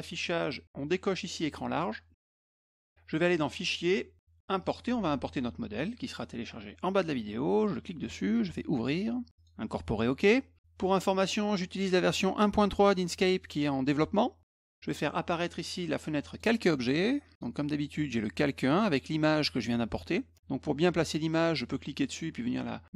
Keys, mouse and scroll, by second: 2.7 click, 3.5 click, 4.6 click, 7.6 click, 8.8 click, 9.4 click, 11.3 click, 15.6 click, 16.3 click, 17.4 click, 21.7-22.9 drag.